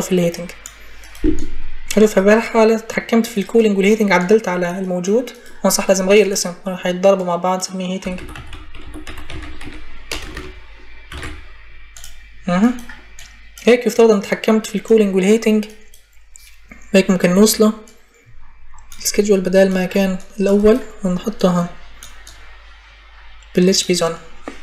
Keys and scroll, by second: 7.5-11.5 typing.